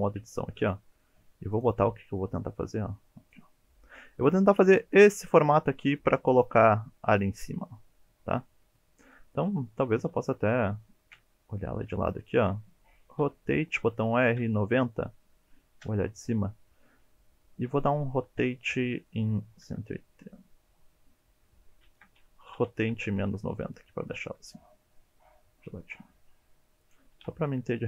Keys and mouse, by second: 0.3 shift+middle drag, 6.0 middle drag, 8.4-8.8 middle drag, 9.1 middle click, 11.1 KP_3, 13.2 r, 14.4 KP_9, 14.5 KP_0, 18.3 r, 19.5 KP_1, 19.6 KP_8, 21.9 ctrl+z, 22.6 r, 22.8 KP_Subtract, 23.0 KP_9, 24.4 g, 26.8 click, 27.2 s.